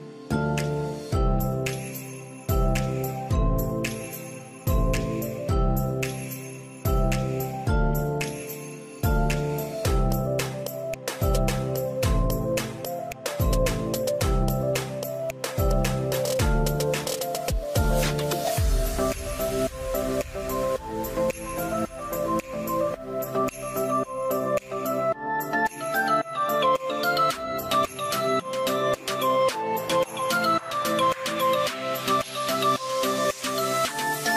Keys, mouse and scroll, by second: 13.7 middle click, 15.1 scroll up 1, 15.6 middle click, 16.2-17.0 scroll up 1, 20.8-21.8 scroll up 1, 23.5-23.9 scroll up 2, 28.4 scroll down 1, 28.8 space, 29.0 middle click, 29.7 middle click, 30.7 double click, 31.0 n, 33.2 space.